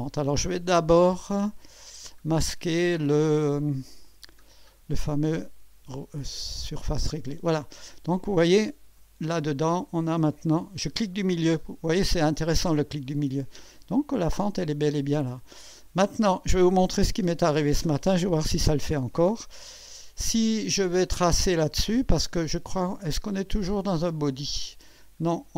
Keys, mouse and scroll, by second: 1.8 click, 4.0 click, 6.2 click, 7.0 space, 7.9-9.1 drag, 9.2-9.9 scroll up 2, 11.4 middle click, 12.1-16.4 drag, 19.1-19.4 scroll down 1, 19.9 scroll down 1, 21.0 scroll down 1, 24.3 click.